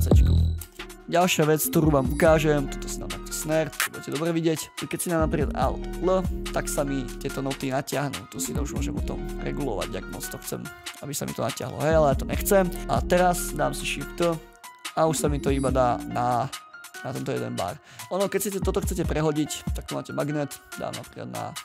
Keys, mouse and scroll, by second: 0.6 space, 2.7 double click, 3.2 ctrl+scroll down 1, 3.9 ctrl+a, 3.9 right click, 4.7 ctrl+a, 5.9 alt+l, 14.1 shift+d, 16.2-17.5 ctrl+scroll up 4.